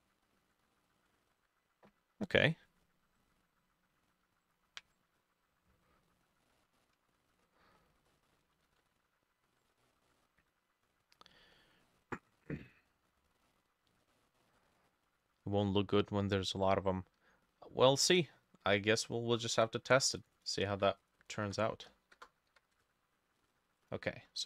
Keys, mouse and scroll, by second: 0.8 double click, 6.5 middle click, 7.5-9.8 drag, 7.5-7.8 scroll up 1, 7.8 scroll down 1, 8.6 ctrl+middle click, 8.7 ctrl+s, 9.8 middle click, 11.6-17.1 drag, 11.6 middle click, 14.1 middle click, 20.4-24.4 ctrl+drag, 20.6 ctrl+middle click, 20.7 ctrl+c, 21.4 middle click, 21.5 ctrl+v, 22.2 BackSpace, 22.5 7, 22.8 Return.